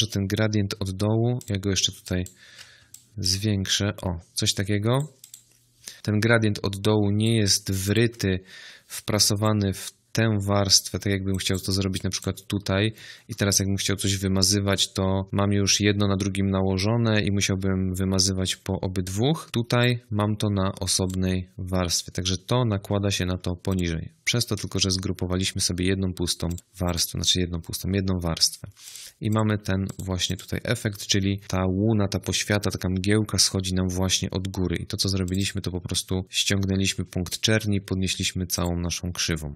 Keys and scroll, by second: 17.9 ctrl+z.